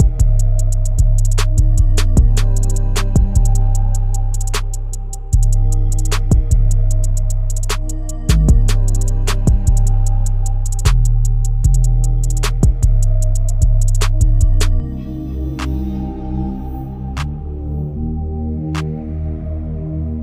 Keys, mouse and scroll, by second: 0.2 click, 1.6 click, 2.2-2.8 scroll down 4, 3.2-3.7 scroll down 2, 3.7 scroll up 7, 6.7-10.1 drag, 11.4-12.8 scroll down 1, 12.8-14.8 scroll down 1, 14.8-15.4 scroll up 2, 15.4-16.6 scroll down 3, 16.6 click.